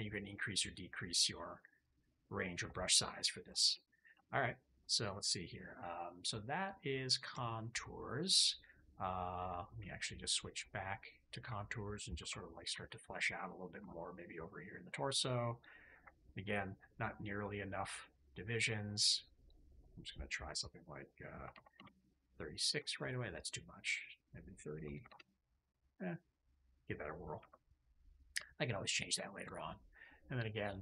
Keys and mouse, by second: 1.7 click, 2.6 middle click, 3.4 shift+click, 4.1 shift+click, 6.0 middle click, 7.3 shift+click, 8.6 middle click, 9.7 alt+q, 12.1 KP_3, 12.7 shift+middle click, 14.9 ctrl+middle click, 16.4-18.0 drag, 19.3-21.7 drag, 22.7 shift+click, 23.7-25.0 drag, 25.7 click, 27.3 KP_3, 29.9 ctrl+click.